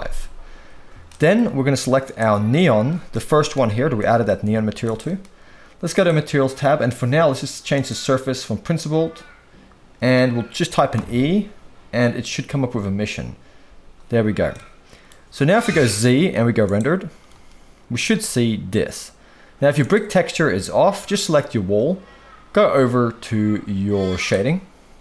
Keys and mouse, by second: 1.1 shift+middle drag, 2.0 click, 4.0 middle click, 4.4 g, 4.8-5.9 right drag, 5.9 click, 7.7-11.0 drag, 14.5-15.1 middle drag, 15.7 z, 19.8 click.